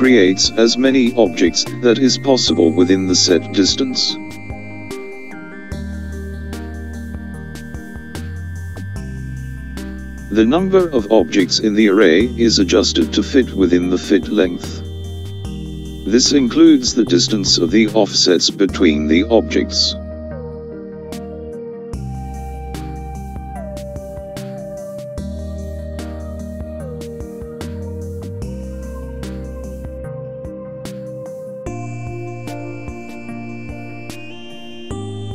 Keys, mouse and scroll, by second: 2.9 click, 10.9 click, 18.4 click, 21.8 click, 28.9 click, 31.2 click, 32.3-35.3 drag.